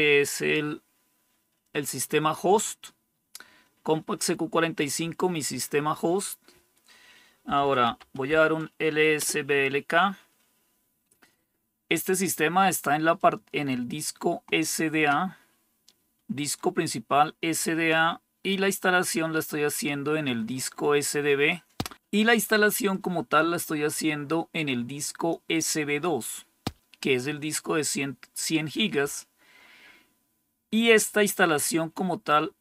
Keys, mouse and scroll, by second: 7.1-8.7 typing, 9.1 Return, 13.1-16.4 drag, 18.9-21.4 drag, 22.8-25.2 drag.